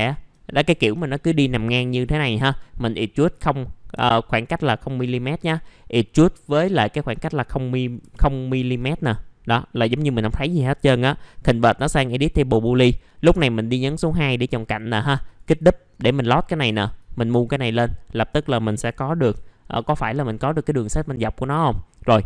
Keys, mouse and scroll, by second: 0.0 alt+middle click, 3.1 right click, 8.0 F4, 9.0 middle click, 12.5-18.4 drag, 18.6 middle click, 20.1-20.7 scroll down 1, 20.8 middle click.